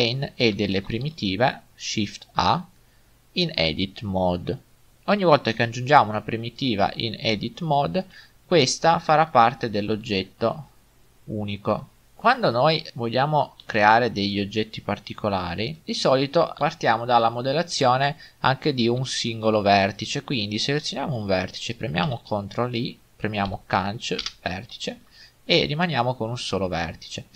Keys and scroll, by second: 1.0 a, 6.9 g, 10.4 g, 13.7 ctrl+Tab, 15.8 Tab, 22.1 ctrl+i.